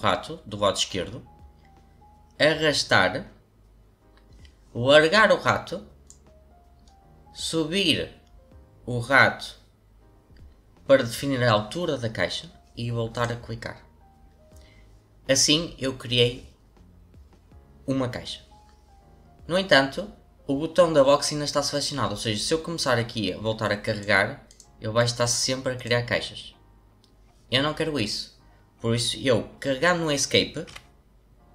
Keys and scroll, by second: 30.6 Escape.